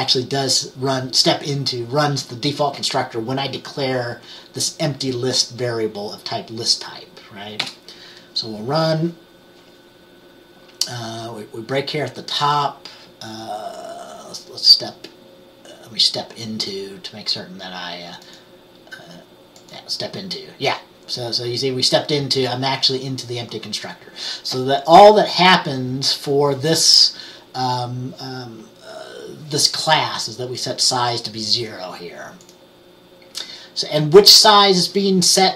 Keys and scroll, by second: 7.7 F10.